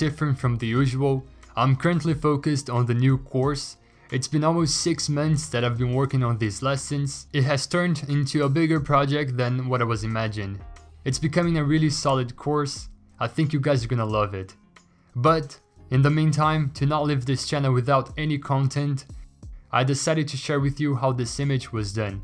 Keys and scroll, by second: 0.0-0.4 typing, 0.4 Return, 1.7-4.8 typing, 6.4 ctrl+a, 6.6 ctrl+c, 7.5 ctrl+v, 9.3 ctrl+g, 9.4-11.3 typing, 11.8 ctrl+t, 15.3 Escape, 15.4 v, 16.1 ctrl+j, 17.0 ctrl+t.